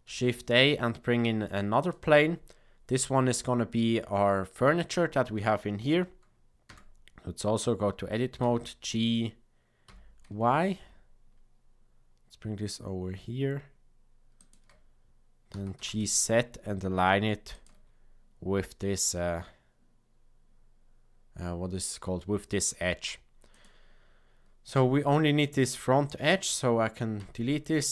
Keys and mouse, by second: 0.0 shift+a, 6.6 Tab, 8.4 g, 15.5 g, 23.5 click, 27.1 x.